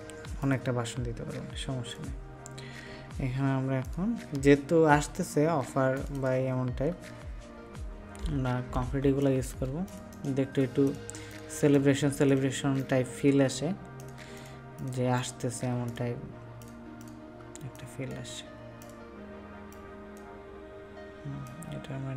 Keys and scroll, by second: 9.0 ctrl+space.